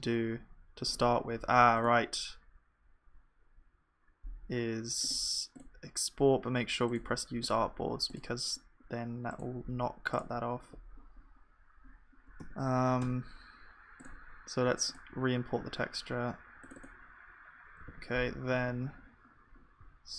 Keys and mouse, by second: 12.5 Tab, 13.0 Tab, 17.8 ctrl+s, 18.5-19.8 middle drag, 18.5 a, 19.8 s.